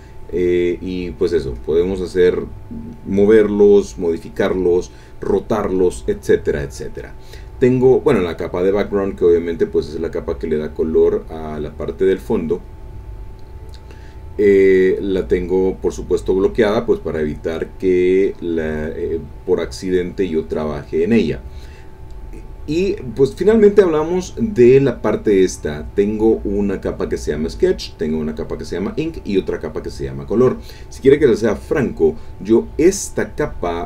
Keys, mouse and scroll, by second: 1.5 click, 8.3 click, 9.4 click, 12.5 click, 15.2 click, 16.4 click, 17.0 click, 19.3 click, 20.5 click, 23.6 click, 25.8 click, 28.1 click, 29.1 click, 30.1 click.